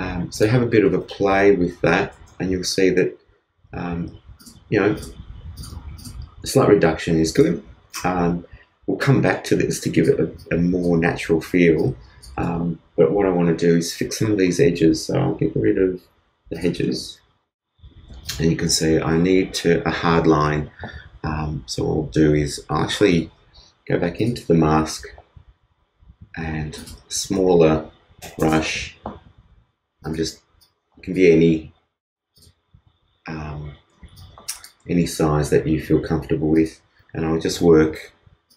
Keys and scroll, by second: 34.9 shift+space.